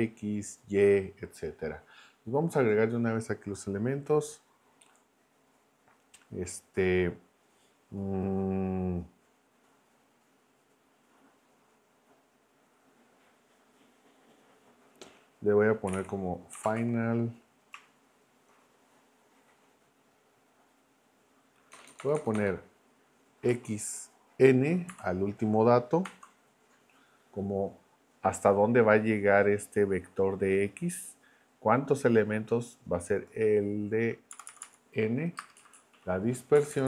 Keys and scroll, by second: 15.6-17.3 typing, 21.7 BackSpace, 23.5 x, 26.0 !, 34.3 Left, 35.4 space, 35.5 Right, 36.6 Left.